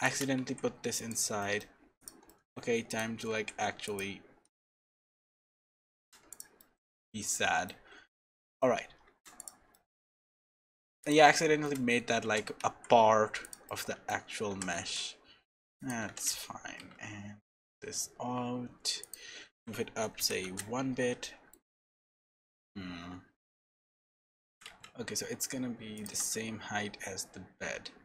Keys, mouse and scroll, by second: 0.4 x, 1.4 middle click, 2.0 click, 2.3 middle click, 2.9 shift+click, 3.3 x, 4.6 middle click, 5.2 shift+middle click, 6.3 click, 6.6 middle click, 7.7 Tab, 7.9-9.2 scroll down 6, 8.4 middle click, 9.4 click, 9.7 middle click, 10.1 shift+a, 11.3 shift+middle click, 11.9-12.4 scroll up 3, 12.3 g, 13.6 middle click, 14.5 g, 21.2 shift+middle click, 22.7-23.4 scroll up 4, 23.7 shift+middle click, 24.5 s, 26.1 g.